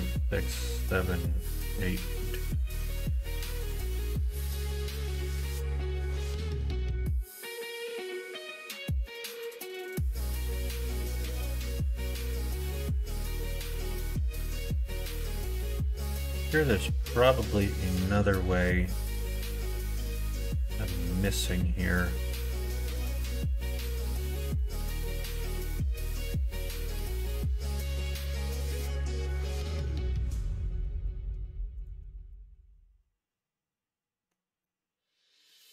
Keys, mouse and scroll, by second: 3.2 click, 5.2 shift+middle click, 6.7 middle click, 7.4-11.2 middle drag, 11.7 middle click, 13.7 middle click, 14.8 middle click, 15.4 shift+middle click, 16.4-21.5 middle drag, 22.0 click, 22.8-23.9 middle drag, 24.5 click, 25.4 middle click, 26.0 shift+middle click, 27.4 shift+middle click, 28.1 middle click, 29.4 middle click, 30.0 click, 30.7 2, 31.0 click, 31.8 shift+click, 32.3-34.3 middle drag, 34.6 middle click.